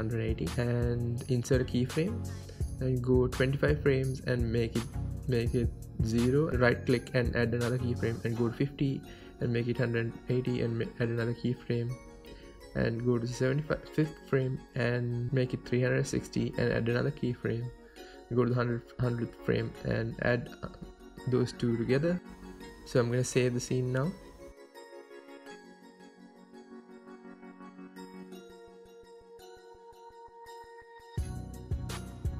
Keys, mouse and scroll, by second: 1.2-2.6 drag, 1.7 KP_Enter, 2.6 right click, 3.4-6.7 drag, 6.4 KP_Enter, 6.7-7.8 right drag, 7.8-16.5 drag, 14.7 BackSpace, 16.2 KP_Enter, 16.5 right click, 17.3-20.8 drag, 20.4 KP_Enter, 20.8-22.6 right drag, 27.8-31.9 right drag, 30.4 space, 31.9 click.